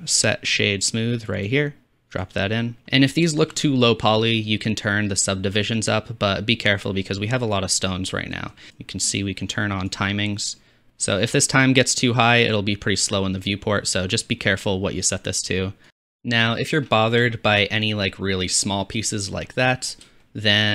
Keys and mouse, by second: 2.9 middle click, 5.8-6.9 drag, 6.9-10.7 middle drag, 16.9-20.7 middle drag.